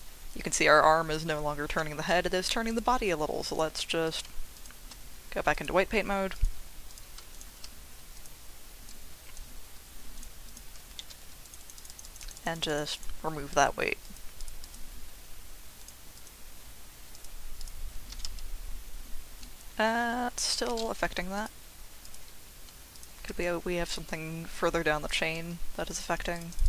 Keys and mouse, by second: 1.7 Escape, 2.8 click, 4.5 shift+click, 5.6 click, 6.9 click, 8.3-9.3 drag, 10.1 ctrl+click, 10.5 ctrl+click, 11.0 middle click, 11.4 click, 11.6 click, 11.7 click, 11.9 click, 12.0 click, 12.2 click, 12.3 click, 12.5 click, 12.7 click, 12.9 click, 14.4 click, 16.2 click, 17.2-17.6 drag, 18.1 r, 18.2 z, 20.3 Escape, 21.3-22.1 drag, 23.0 shift+click, 24.0-25.1 drag, 25.9 ctrl+click, 26.3 click, 26.6 click.